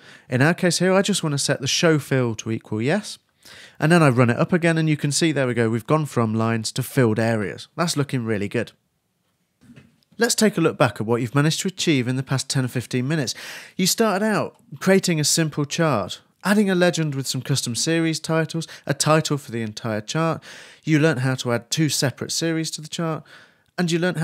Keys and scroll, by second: 0.0-0.1 typing, 0.3 super+r, 3.8 super+Left.